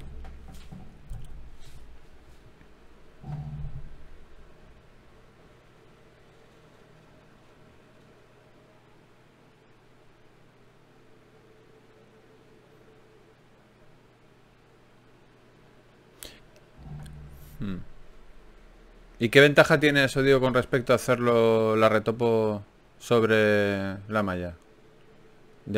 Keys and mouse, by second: 0.0 e, 1.8 s, 3.1 KP_3, 5.3 g, 7.7 click, 8.5 ctrl+z, 9.5 KP_7, 12.9 e, 14.1 s, 15.7 g, 16.5 r, 18.7 r, 20.6 g, 22.5 g.